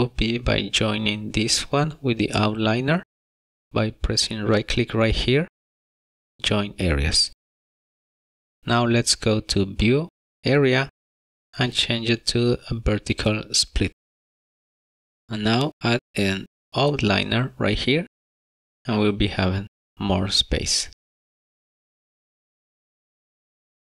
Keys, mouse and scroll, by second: 5.7 right click, 10.2 click, 19.1 click, 23.0 middle click, 23.3 middle click, 23.8 scroll down 1.